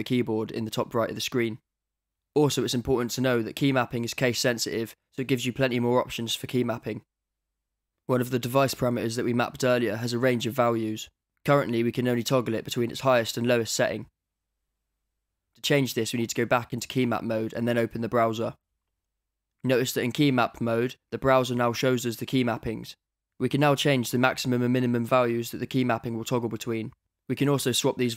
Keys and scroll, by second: 9.0 d, 12.0 d, 20.3 d.